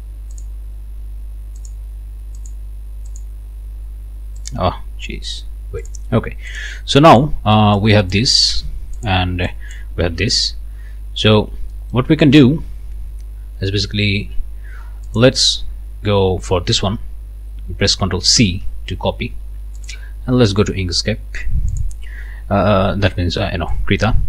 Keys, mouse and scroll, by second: 0.3 click, 1.6 click, 2.4 click, 3.1 click, 4.4 click, 5.8 click, 6.5 click, 7.1 click, 7.8 click, 8.4 ctrl+z, 10.1 ctrl+z, 10.8-11.6 ctrl+scroll up 4, 11.7 ctrl+middle click, 15.1 middle click, 18.4 ctrl+c, 19.8 click, 21.7 click, 23.7 click.